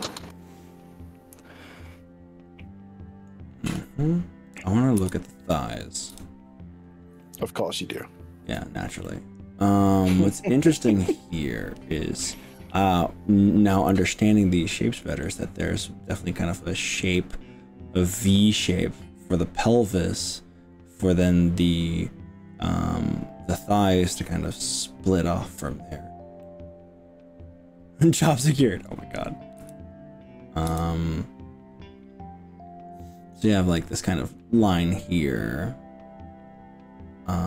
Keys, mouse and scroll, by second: 5.0 KP_1, 6.1 KP_3, 7.2-8.7 shift+middle drag, 9.0-15.3 middle drag, 26.4-28.9 middle drag, 29.7 KP_1, 30.7 KP_3.